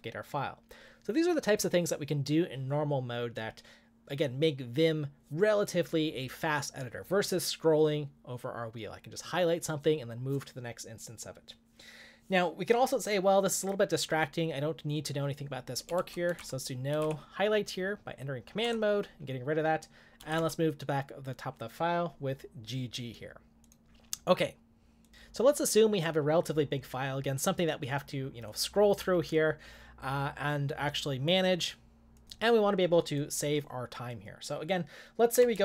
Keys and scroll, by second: 16.0-17.5 typing, 18.6 Return, 20.1-20.9 typing.